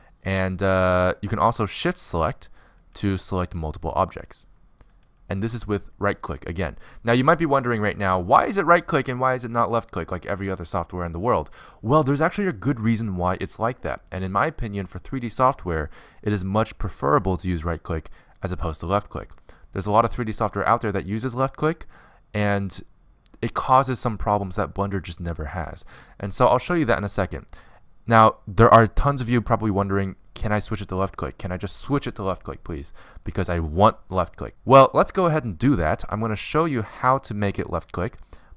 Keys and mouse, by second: 0.1-2.0 right drag, 3.4-38.5 right drag.